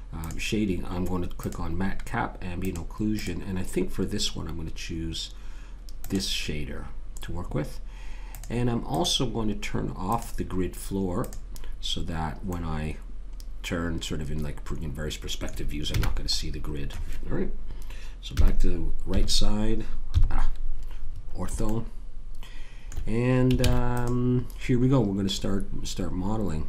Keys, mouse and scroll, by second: 0.2-5.1 drag, 8.3-13.2 drag, 12.5-13.6 middle drag, 15.8 n, 18.3 KP_3, 19.1 KP_5, 20.1 KP_5, 21.7 click, 21.9 middle click, 22.0 middle click, 23.6 ctrl+s.